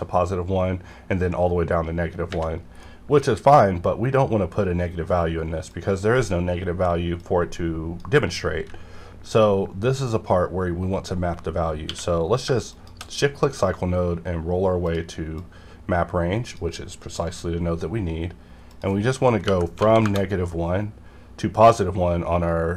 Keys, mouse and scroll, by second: 2.8-5.7 middle drag, 5.7-10.3 drag, 11.9 q, 12.7 shift+click, 13.1 scroll up 1, 14.0 scroll up 1, 14.8 click, 14.8-18.7 drag, 19.5 KP_Subtract, 19.8 KP_1, 20.0 KP_Enter.